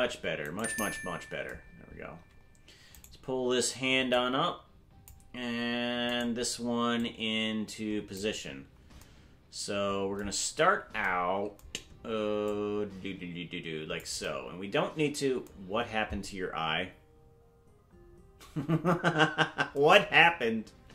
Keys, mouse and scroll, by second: 0.6 right click, 1.9-2.3 scroll up 4, 3.0 right click, 4.1 click, 6.2 right click, 7.0-8.2 drag, 12.5-14.1 drag.